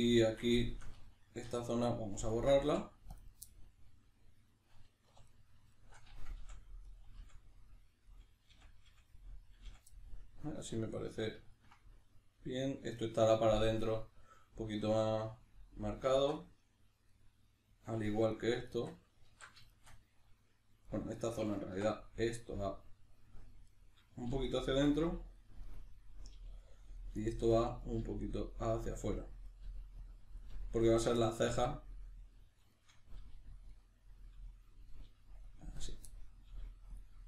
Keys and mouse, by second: 1.5 3, 1.7 right drag, 2.3 ctrl+right click, 2.6 x, 3.5-5.1 middle drag, 5.1 2, 5.3 right click, 5.7 shift+right click, 6.4 f, 6.9 right drag, 7.2 f, 8.1 right click, 8.5 f, 9.2-13.0 middle drag, 9.6 f, 13.0 right click, 13.8-18.3 middle drag, 18.3 right drag, 18.7 shift+right click, 19.3 alt+q, 19.7-20.9 shift+middle drag, 20.9 right click, 21.7 1, 22.7 right click, 23.7 right click, 24.3 g, 24.7 click, 24.9 right click, 25.0 g, 25.4 click, 25.7 right click, 26.3 g, 26.6 click, 27.0 right click, 27.1 g, 27.6 click, 27.9 right click, 28.0 g, 28.7 click, 29.5 right click, 29.7 g, 30.1 click, 30.4 right click, 30.5 g, 31.0 click, 31.2-33.2 middle drag, 33.2 g, 33.6 click, 33.7 middle click, 34.3 g, 34.6 click, 34.9 right click, 35.1 g, 35.5 click, 35.8 right click, 36.1 middle click, 36.5 g, 37.0 click.